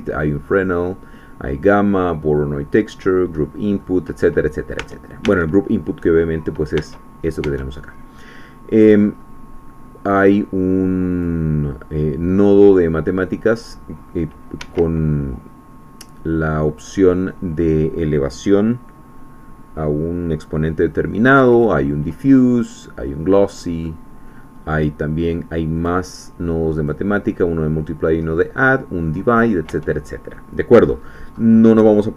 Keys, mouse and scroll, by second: 3.4 middle click, 4.3-4.7 scroll down 1, 4.8 Tab, 6.8 Tab, 7.5 Tab, 9.0-9.4 scroll up 2, 11.1 click, 13.5-14.6 drag, 14.6 Escape, 21.5 click, 22.6 click, 23.8 middle click, 24.1-24.4 scroll up 1, 25.8 click, 26.8 click, 28.2-28.6 scroll down 1, 29.1 middle click, 29.7 Tab, 30.2-30.8 scroll down 1, 30.8-32.1 scroll up 1.